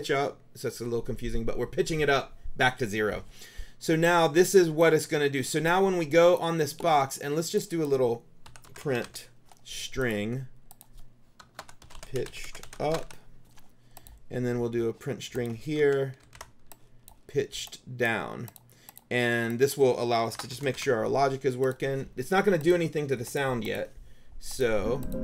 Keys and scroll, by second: 8.3-9.7 typing, 11.5-13.6 typing, 15.9 ctrl+c, 16.4 ctrl+v, 20.2-21.3 typing.